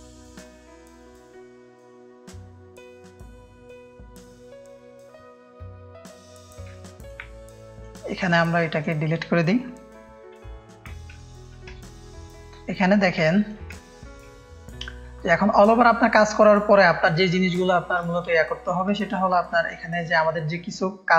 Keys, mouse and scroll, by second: 0.3 click, 1.0 alt+shift+click, 2.3 click, 2.8 ctrl+BackSpace, 2.9 ctrl+v, 3.9 click, 4.5 w, 4.6 w, 6.4 ctrl+space, 6.4 ctrl+click, 6.7 ctrl+space, 6.7 ctrl+click, 7.5 click, 8.1-8.8 drag, 10.1 Delete, 10.5-11.0 drag, 11.1 ctrl+click, 11.2 ctrl+space, 11.7 click, 11.7 space, 12.3 click, 12.9 click, 13.2 ctrl+space, 13.2 ctrl+click, 13.7 space, 13.8 click, 14.3 click, 14.3 space, 15.2 click, 15.2 space, 17.4 click, 17.4 space, 18.6 click, 19.0 click, 19.0 space, 19.7 ctrl+space, 19.7 ctrl+click.